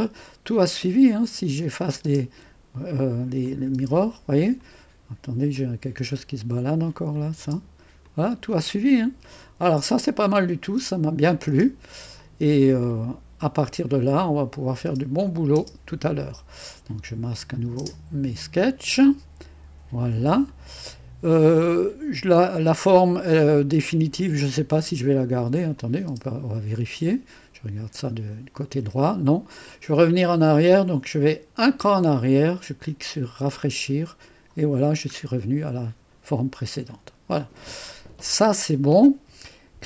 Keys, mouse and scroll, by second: 1.3 click, 1.6-2.1 typing, 2.1 click, 3.5 click, 3.8 typing, 4.6 click, 5.8 click, 7.2 click, 7.4 typing, 8.1-9.7 drag, 10.5-11.8 drag, 10.8-16.2 typing, 12.2 click, 14.0 click, 14.7 click, 15.3 click, 16.3 click, 17.4 click, 17.6-18.4 typing, 19.0-23.6 drag, 23.7 click, 25.8 click, 25.9-26.6 typing, 26.8 click, 28.0 click, 31.6 click, 33.4 click, 35.3-35.8 scroll up 2, 36.7-37.7 scroll down 2.